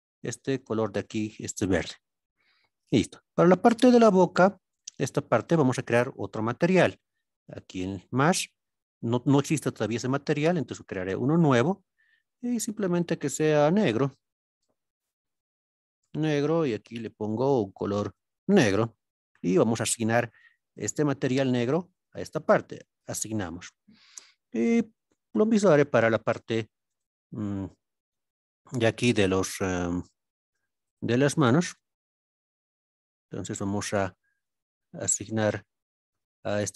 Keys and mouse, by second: 3.7 click, 7.4 click, 9.8-11.1 drag, 11.3 click, 13.0-16.5 drag, 20.7 click, 23.1 click, 28.7 alt+click, 29.3-29.9 middle drag, 32.4 shift+click, 32.9-33.6 middle drag, 35.3 shift+click.